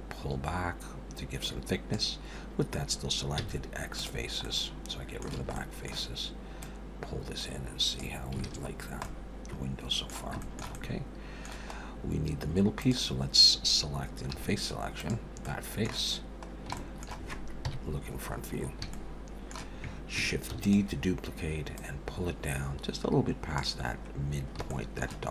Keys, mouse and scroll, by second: 3.4 x, 4.4 middle click, 5.4 a, 5.5 middle click, 6.6 click, 8.4 alt+a, 8.7 scroll down 2, 9.0 middle click, 10.4 shift+middle click, 10.7 middle click, 11.7 scroll up 1, 12.8 click, 14.2 3, 15.0 click, 15.4 middle click, 16.5 scroll down 1, 16.8 shift+middle click, 17.7 KP_1, 18.2-18.9 scroll up 4, 18.9 shift+middle click, 20.5 shift+d, 21.8 click, 23.9-24.3 scroll up 4, 24.7 shift+middle click.